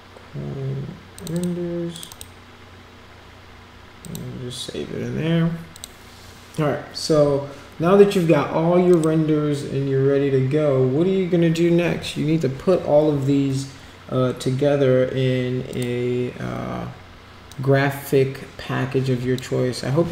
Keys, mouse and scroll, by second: 1.1 click, 1.3 click, 1.9 click, 2.1 click, 4.0 click, 5.7 click, 8.9 click, 15.7 click, 17.5-19.3 drag.